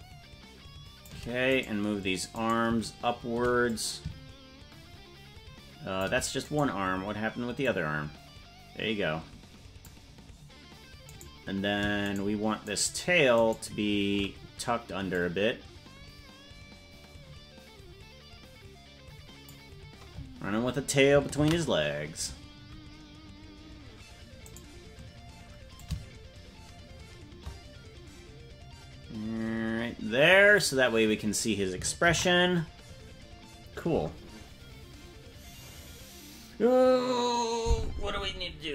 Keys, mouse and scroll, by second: 1.9 right click, 2.8 right click, 4.0-6.5 drag, 6.9 right click, 8.0-10.3 drag, 11.5 right click, 12.4 shift+right click, 13.0 shift+right click, 13.8 shift+right click, 15.6-19.9 drag, 24.0 ctrl+s, 24.7 right click, 26.1-31.0 shift+drag, 34.9 ctrl+s.